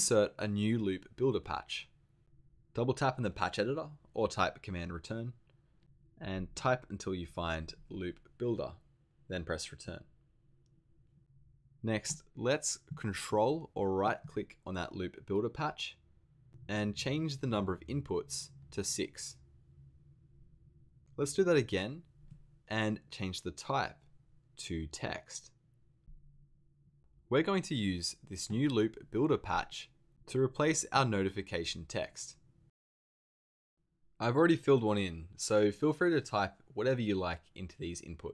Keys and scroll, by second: 5.8 super+Return, 7.0-8.4 typing, 9.8 Return.